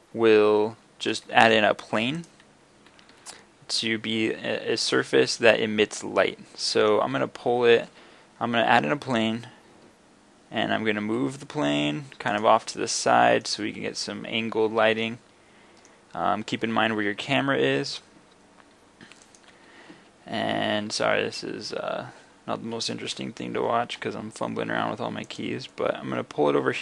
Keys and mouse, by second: 0.8 shift+a, 3.1 g, 5.0-6.0 middle drag, 7.9 g, 12.4 drag, 12.7 middle click, 12.9 click, 13.1-14.2 drag, 14.2 middle click, 15.2 middle click, 17.0 g, 19.4 click, 19.6 g, 23.2 g, 25.4-26.4 middle drag, 26.7 middle click.